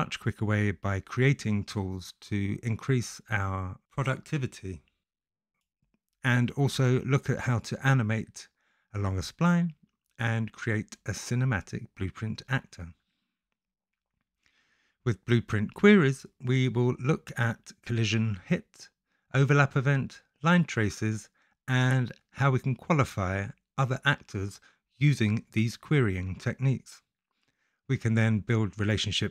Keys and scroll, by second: 25.6 w, 26.5 w.